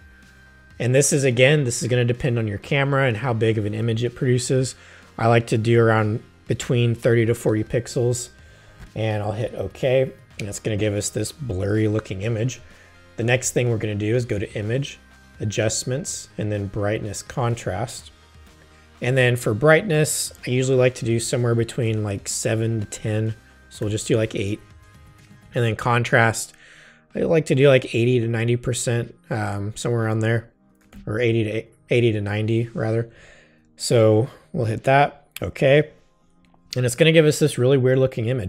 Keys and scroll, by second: 23.8 8, 25.3 Tab, 30.5-31.4 typing.